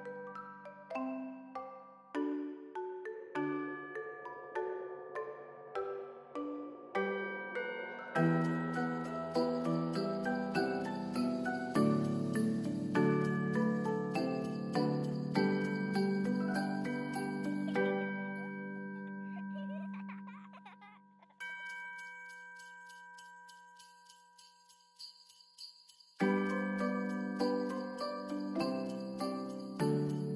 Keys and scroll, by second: 18.2 ctrl+d, 26.8 b.